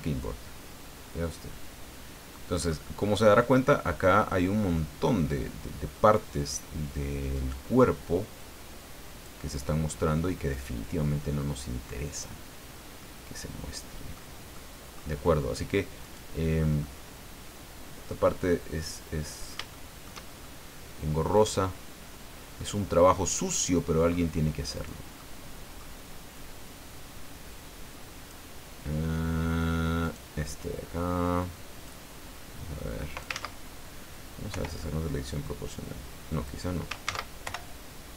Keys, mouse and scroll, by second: 3.0-3.4 scroll up 1, 3.5 scroll up 1, 7.3 right click, 8.3 click, 10.5 right click, 12.1 click, 13.0-14.3 middle drag, 14.5 middle click, 16.0 right click, 16.8-18.2 middle drag, 18.5-20.2 middle drag, 21.2 right click, 22.5-24.3 middle drag, 24.7 right click, 25.1 middle click, 26.3-28.5 drag, 30.0 right click, 31.9-33.4 drag, 33.3 ctrl+z, 34.5 o, 35.4-36.7 drag, 37.1 ctrl+z, 37.4 ctrl+o.